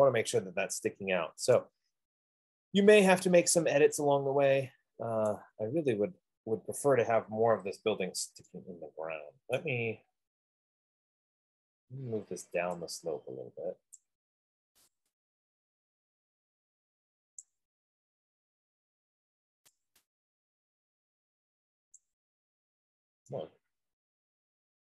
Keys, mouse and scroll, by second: 1.0 middle click, 5.6 right click, 7.4 scroll, 8.1 scroll, 10.0 right click, 10.1 middle click, 10.3 middle click, 10.9 middle click, 11.5 middle click, 11.6 middle click, 13.3-14.1 scroll, 14.2 click, 17.7 click, 18.3 scroll, 18.5-19.1 scroll up 7, 22.3 click, 23.1 scroll down 4.